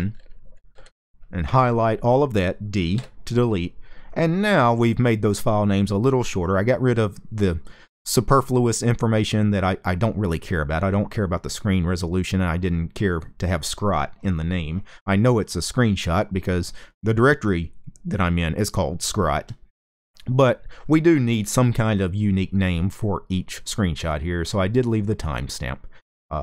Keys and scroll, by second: 0.0-0.4 typing, 2.6 d.